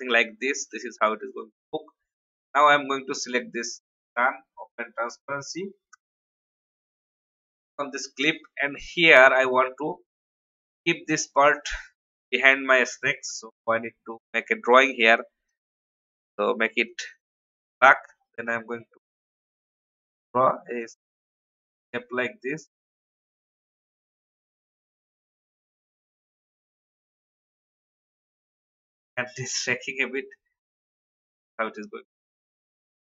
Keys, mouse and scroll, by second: 9.8-10.1 alt+scroll up 1, 11.9 alt+scroll up 1, 13.3-13.8 scroll down 2, 15.4-31.4 drag, 31.4 alt+scroll down 1, 32.3-33.1 drag.